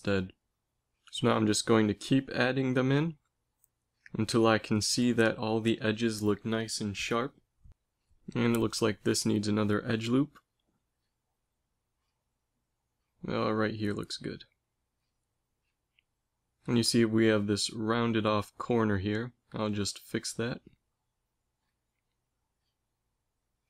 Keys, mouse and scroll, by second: 3.2 Tab, 4.9 ctrl+r, 8.2 click, 8.3 ctrl+z, 9.2 ctrl+r, 9.2 click, 18.0 ctrl+r, 22.8 ctrl+r.